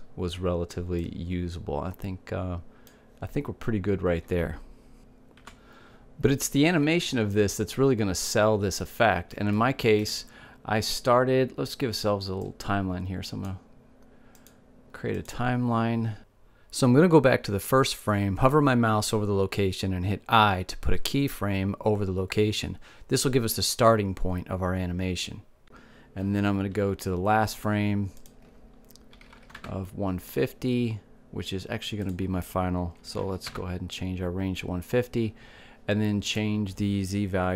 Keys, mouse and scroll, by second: 2.4-4.2 drag, 9.9-12.5 middle drag, 13.6-15.2 drag, 15.5 click, 16.4-18.2 drag, 21.0 i, 29.0-30.9 drag, 32.8-34.7 drag, 37.0-37.5 drag.